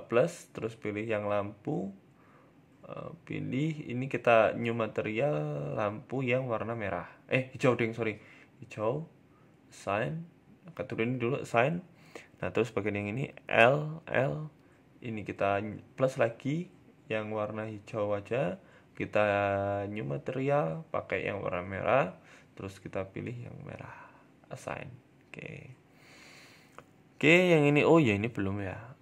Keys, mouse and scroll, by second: 3.7 click, 4.1 click, 7.5 click, 10.7 click, 11.0 Tab, 11.6 Tab, 12.5 a, 12.6 a, 13.1 l, 13.5 l, 15.0 click, 15.4 click, 18.4 click, 18.8 click, 21.9 click, 24.3 click, 24.5-24.9 scroll down 3, 24.7 Tab, 24.9 middle click, 25.6-26.3 scroll down 1, 26.5-26.9 scroll up 4, 26.9 middle click, 27.7 Tab, 28.0 scroll up 2, 28.3 shift+middle click, 28.8-29.0 typing.